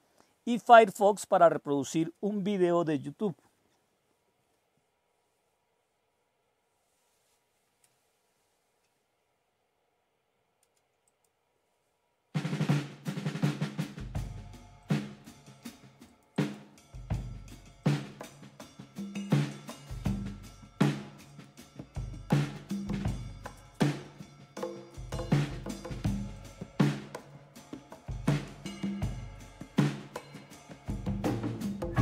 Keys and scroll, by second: 7.8 super+Return, 28.3-29.2 typing, 30.7 typing, 31.8 typing.